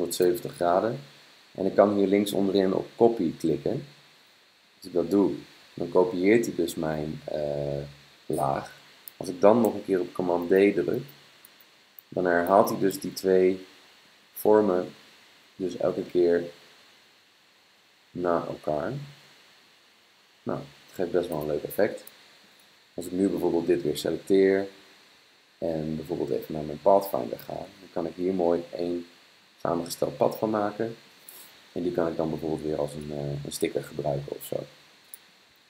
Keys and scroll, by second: 9.7 super+d, 10.4 super+d, 11.0 super+d, 11.5 super+d, 12.1 super+d, 12.6 super+d, 13.1 super+d, 13.5 super+d, 14.0 super+d, 14.8 super+d, 15.4 super+d, 15.9 super+d, 16.1 super+d, 16.5 super+d, 18.8 super+d, 19.2 super+d, 20.1 super+d.